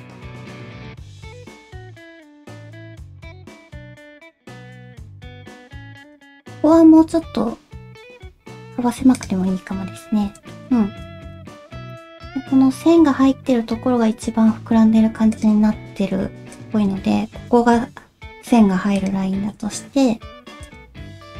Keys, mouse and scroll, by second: 0.7 g, 1.2 g, 2.4 click, 2.4 g, 3.1 g, 3.7 middle click, 3.7 g, 4.2 middle click, 4.6 middle click, 6.9 s, 9.6 middle click, 10.7 shift+middle click, 11.1 KP_1, 15.4 click, 15.7 alt+z, 17.3 g, 19.4 shift+middle click.